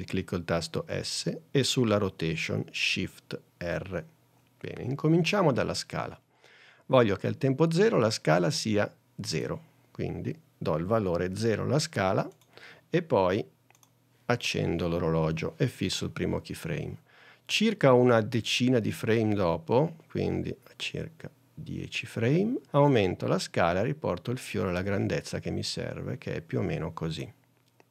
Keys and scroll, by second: 0.9 s, 11.4 o.